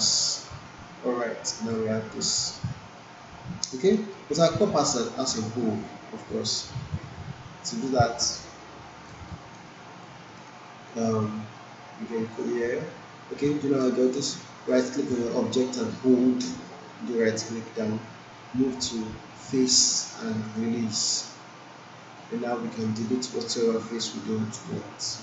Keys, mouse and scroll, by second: 2.2-3.8 alt+drag, 4.0 alt+middle click, 4.4 alt+click, 5.7 click, 6.7-7.9 alt+drag, 9.3 alt+right click, 9.7 alt+click, 10.3 alt+middle click, 10.7 alt+right click, 11.3 right click, 14.1 alt+middle click, 14.7-22.0 right drag, 20.5 right drag, 22.3-22.7 alt+click, 22.7 alt+middle click.